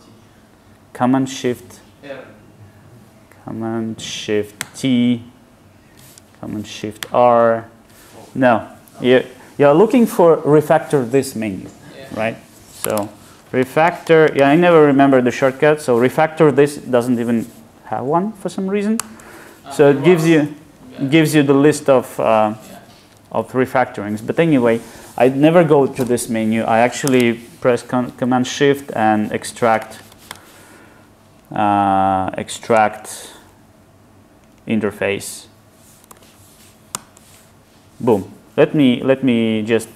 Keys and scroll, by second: 5.0 ctrl+shift+super+t, 19.2 ctrl+alt+t.